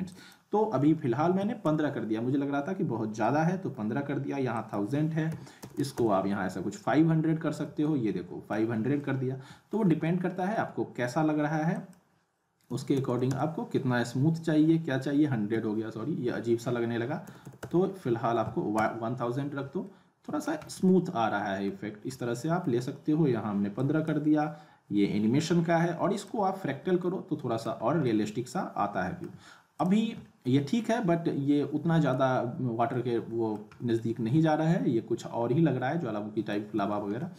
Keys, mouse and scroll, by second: 0.1 click, 2.9 click, 3.2-3.8 alt+middle drag, 4.5 click, 7.7 click, 7.8-8.7 alt+middle drag, 10.3 alt+middle click, 10.6-11.4 scroll down 2, 11.4-11.7 scroll down 1, 11.7-13.8 drag, 19.6 click, 19.8-20.5 alt+middle click, 20.6 scroll down 1, 20.8-21.8 alt+middle click, 21.8 scroll up 1, 22.2-22.8 alt+middle drag, 23.7 click, 27.0-27.9 alt+middle click, 27.8 scroll down 1, 28.1-29.3 alt+middle drag, 29.8 click, 30.4-32.3 alt+middle drag, 32.3 scroll up 1, 32.9-33.5 alt+middle click, 33.8 scroll down 1, 34.0-36.8 alt+middle drag.